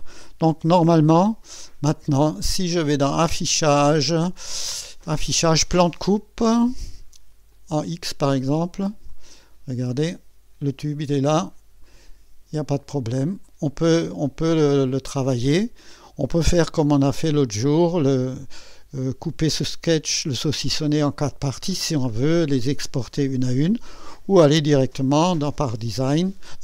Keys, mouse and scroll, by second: 0.5 2, 1.5-2.1 right drag, 3.1 click, 6.0 click, 7.5 click, 8.4-9.3 drag, 9.4 scroll up 1, 10.1 click, 11.4 scroll up 1, 11.9-12.7 right drag, 12.8-13.6 drag, 14.7-15.1 scroll down 1, 17.8-18.6 typing, 17.8 click, 18.6-19.7 drag, 21.8-22.1 scroll down 1, 23.7-24.3 drag, 24.5-26.0 typing, 25.1 scroll up 1.